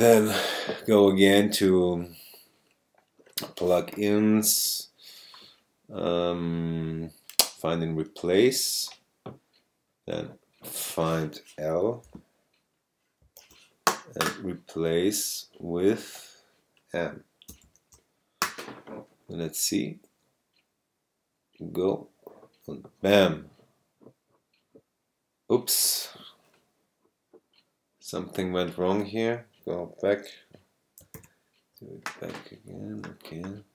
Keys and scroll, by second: 13.2 shift+l, 17.6 shift+m, 31.1 super+z.